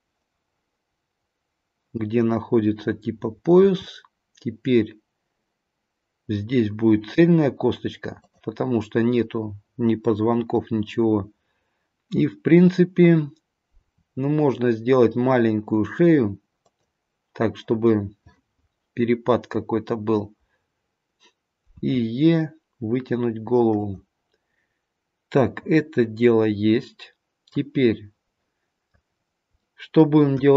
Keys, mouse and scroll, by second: 3.7 e, 13.8 e, 21.8 e, 25.4 middle click, 25.7 middle click, 29.0-29.6 scroll down 1, 29.6 middle click, 29.6-30.4 scroll down 1, 30.4 KP_1.